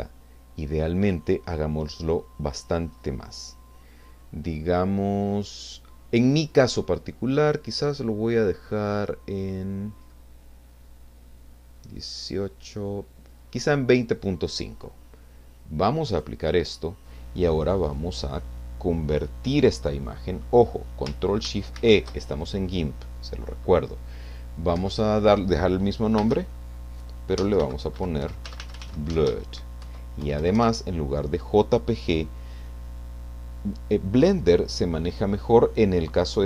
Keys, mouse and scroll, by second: 2.9-3.8 scroll up 2, 5.0-5.8 scroll up 2, 7.5 scroll up 2, 8.7 scroll up 2, 10.1 scroll up 2, 11.2 scroll up 2, 12.9-13.2 scroll up 4, 16.2 click, 21.7 ctrl+shift+e, 24.8 Right, 26.8 space, 27.6 Caps_Lock, 27.9-29.3 typing, 29.8 End, 30.4 BackSpace.